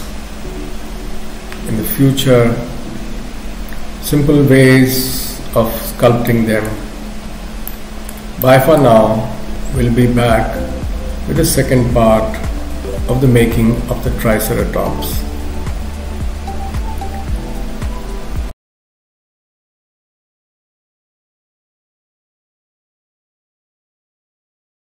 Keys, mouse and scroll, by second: 6.3 shift+middle click, 7.7 middle click, 8.4 shift+middle click.